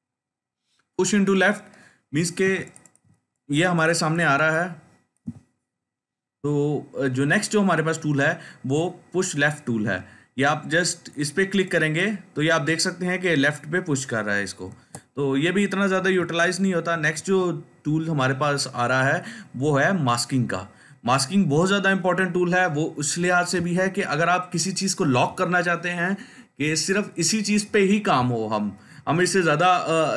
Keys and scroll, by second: 14.6 ctrl+z, 16.3 ctrl+alt+z, 16.8 ctrl+alt+z.